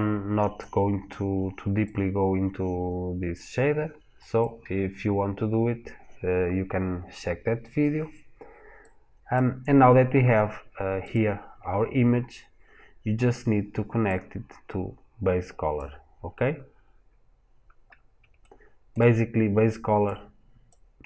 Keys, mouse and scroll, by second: 17.3 scroll down 1, 17.7 scroll up 1, 18.2 shift+middle click, 19.9 click.